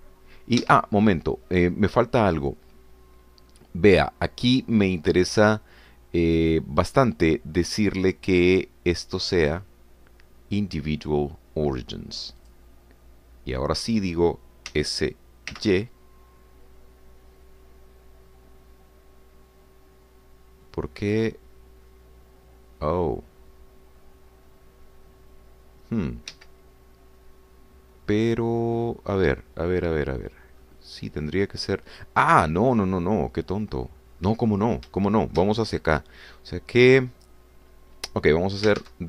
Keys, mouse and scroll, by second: 0.0 y, 1.6 Escape, 10.4 click, 13.5 click, 15.7 s, 16.7 y, 27.3 Escape, 29.3-29.8 scroll down 2, 29.8-30.4 scroll down 2, 30.7 scroll down 2, 31.6 scroll up 2, 32.1 scroll up 2, 35.0-35.6 scroll up 2, 36.0 shift+click, 38.1-38.4 scroll up 2, 38.7 scroll down 2.